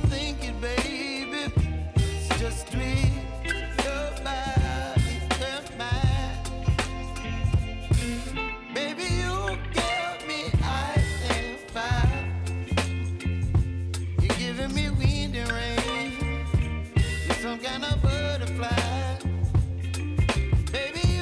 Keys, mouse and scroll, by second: 0.0 space, 1.9-5.9 drag, 6.6 r, 7.6 click, 8.3-9.2 typing, 10.4 click, 11.2 Return, 12.0 click, 12.3 space, 14.6 j, 16.1 click, 16.5 -, 17.3 Return, 18.3-18.7 typing, 19.3 click, 20.2 F9, 20.6 space.